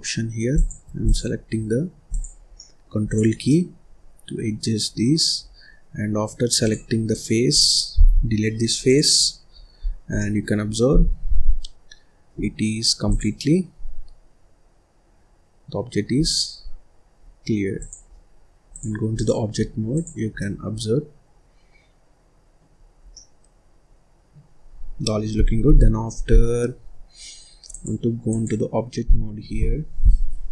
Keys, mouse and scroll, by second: 1.0 click, 1.4-2.0 scroll down 1, 2.0 click, 2.5 scroll down 1, 2.5 middle click, 3.0 click, 3.4-4.8 middle drag, 4.8 scroll down 2, 5.0 middle click, 5.4-6.6 scroll up 4, 6.6 click, 7.1 click, 8.1 Delete, 9.8-10.1 scroll down 1, 10.1 middle click, 10.9 ctrl+s, 14.8 click, 16.5 click, 17.3-17.7 scroll down 2, 17.7 click, 18.6-20.0 drag, 20.3-22.7 middle drag, 22.7-23.0 scroll up 2, 23.0 scroll down 1, 23.1-25.7 middle drag, 25.7 ctrl+s, 26.1 scroll down 2, 26.4 scroll up 2, 27.6-30.5 drag.